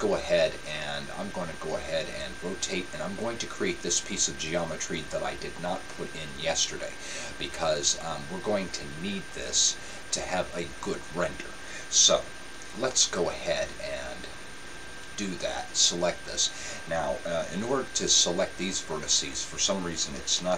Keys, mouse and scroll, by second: 2.3-4.3 middle drag, 14.6-16.0 right drag.